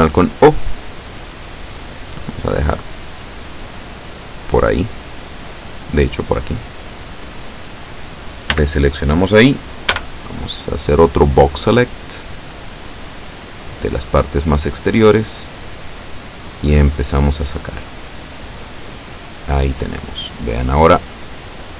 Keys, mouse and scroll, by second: 0.1-7.1 drag, 8.6 a, 10.0 b, 11.3-13.9 drag, 14.8-19.6 drag, 19.6 scroll down 1, 19.8-21.7 middle drag.